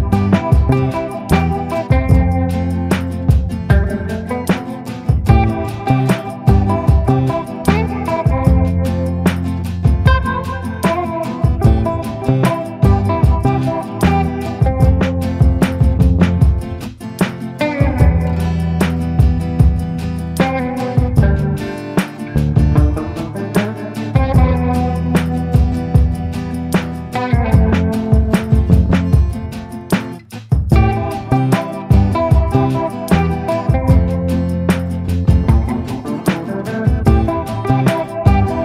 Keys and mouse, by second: 0.9 click, 1.6 ctrl+z, 2.1 click, 2.9 click, 3.5 click, 4.4 click, 5.2 click, 6.0 click, 6.7 click, 7.3 click, 8.0 click, 9.4 middle click, 10.4 shift+middle click, 11.1 shift+middle click, 11.8 shift+middle click, 12.6 middle click, 13.0 middle click, 13.6 shift+middle click, 15.5 click, 16.3 ctrl+z, 16.7 click, 17.1 click, 17.6 ctrl+z, 17.9 click, 18.6 click, 19.3 ctrl+z, 19.5 click, 21.2-22.4 middle drag, 23.0 shift+middle click, 23.6 shift+middle click, 24.4 click, 25.8-27.5 drag, 27.6 ctrl+z, 28.0 click, 29.3 click, 29.7 ctrl+z, 30.0 click, 30.7 click, 31.8 click, 32.6 click, 33.2 click, 34.3 click, 35.9 middle click, 36.5 middle click, 36.9 middle click, 37.4 middle click, 37.9-38.6 shift+middle drag.